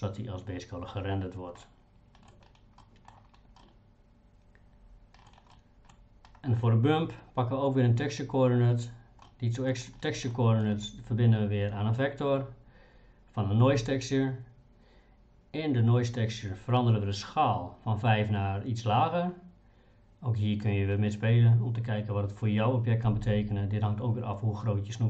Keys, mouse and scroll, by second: 1.6 middle click, 2.8 middle click, 3.6-5.3 middle drag, 5.6 middle click, 9.3 middle click, 10.3 middle click.